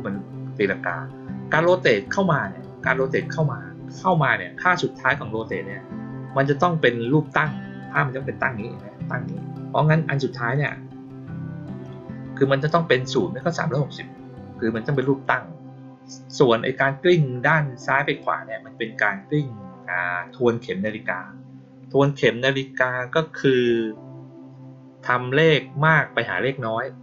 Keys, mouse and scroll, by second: 2.8 click, 3.9 click, 10.4 click, 11.7-13.0 drag, 17.4-18.1 drag.